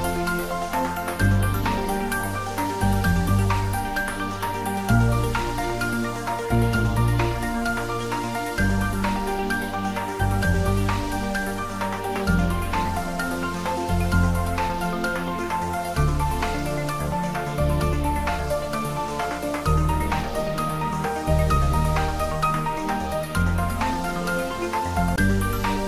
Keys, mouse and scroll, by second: 0.7 click, 4.4 typing, 14.0 click, 18.5-19.6 typing.